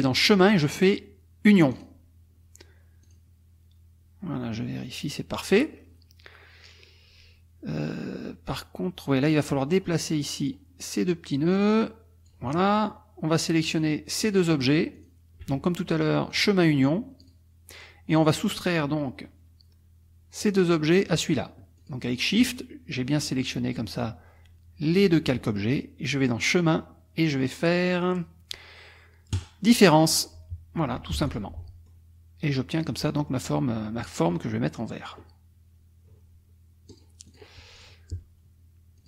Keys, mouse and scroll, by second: 0.2 click, 1.7 click, 3.0 click, 9.5 click, 11.6 click, 13.7 click, 15.0 shift+click, 16.3 click, 17.2 click, 21.8 shift+click, 26.4 click, 29.3 click, 31.1 F1, 31.3 click, 31.6 middle click, 32.7 click, 33.1 middle click, 35.0 click, 36.9 click, 37.3 click, 37.8 click.